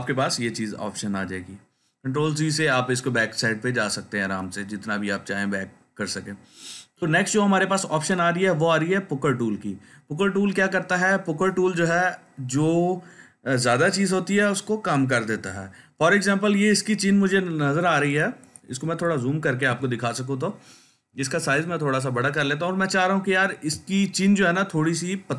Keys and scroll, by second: 0.2 ctrl+z, 0.6 ctrl+z, 17.7 ctrl+space, 18.2-19.6 ctrl+space, 21.4 ].